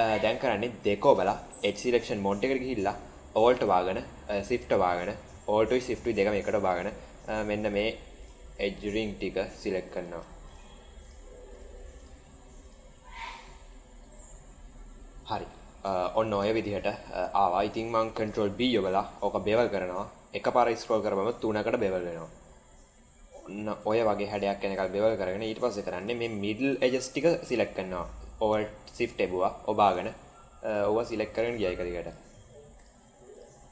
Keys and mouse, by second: 0.8 2, 1.6 middle click, 4.5 alt+shift+click, 6.1 alt+shift+click, 6.5 alt+shift+click, 7.6 alt+shift+click, 8.1 alt+shift+click, 10.4 alt+shift+click, 10.9 alt+shift+click, 11.4 alt+shift+click, 12.5 alt+shift+click, 13.6-15.4 middle drag, 16.5 shift+middle click, 18.3 ctrl+b, 24.8 middle click, 25.8 click, 31.9 alt+shift+click, 33.3 alt+shift+click.